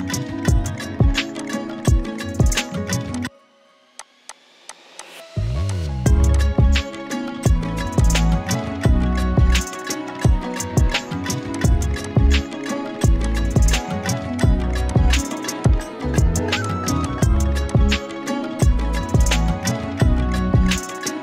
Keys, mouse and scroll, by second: 1.3 space, 1.4 click, 3.1-3.7 shift+click, 3.9 z, 4.0 click, 4.2 space, 4.3 click, 4.7 z, 4.9 click, 4.9 space, 6.7 drag, 8.0-9.2 shift+drag, 11.6 shift+click, 14.4 shift+click, 18.3 Up, 20.3-20.9 scroll down 1.